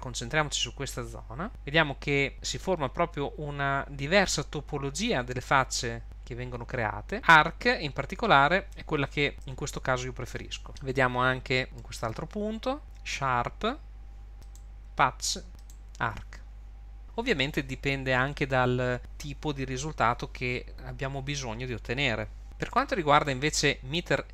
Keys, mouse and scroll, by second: 1.5 click, 10.7 middle click, 10.9 middle click, 12.8 click, 14.3 click, 15.5 click, 22.4 click, 22.7 shift+middle click.